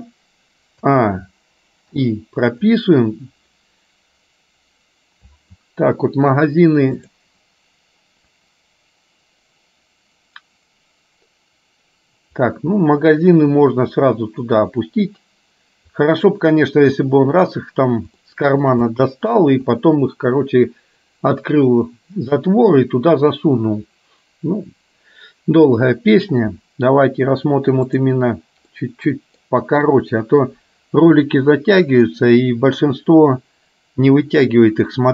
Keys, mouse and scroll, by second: 1.0 a, 2.0 i, 7.0 click, 12.4-16.3 drag, 18.3 shift+middle click, 19.0 middle click, 27.9 click, 28.8 middle click.